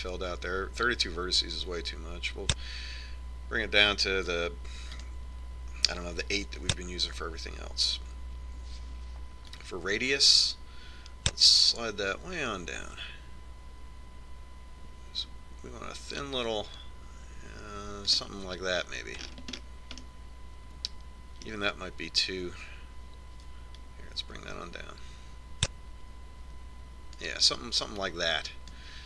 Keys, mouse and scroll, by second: 2.5-4.3 drag, 6.6-8.4 drag, 11.2-13.0 drag, 20.9-23.5 middle drag, 25.6-27.4 drag.